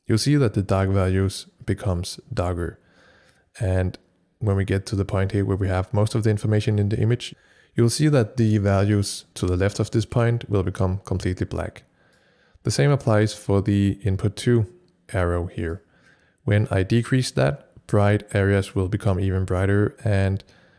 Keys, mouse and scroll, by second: 12.2-20.7 drag.